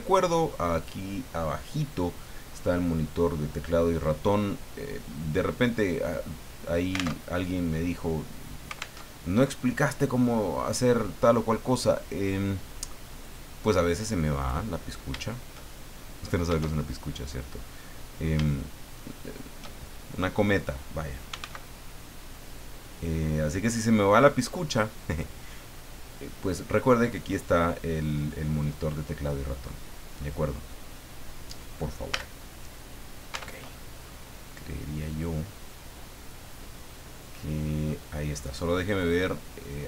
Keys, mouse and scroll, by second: 5.1 scroll down 2, 5.4 middle click, 6.4-6.7 scroll up 2, 7.1 alt+Tab, 9.0 alt+Tab, 10.3 scroll down 2, 13.2 click, 14.3 right click, 15.7 shift+middle click, 16.8 shift+middle click, 17.6-18.0 scroll up 1, 19.2 shift+right click, 21.0-21.9 typing, 25.1 click, 25.5 scroll down 1, 25.8 middle click, 26.6 scroll down 1, 29.2-30.4 middle drag, 30.5-30.8 scroll up 1, 30.9-31.2 scroll down 2, 32.1 a, 32.6-33.1 scroll down 2, 33.3 Tab, 33.7 scroll down 2, 34.1-38.0 drag, 39.0 click.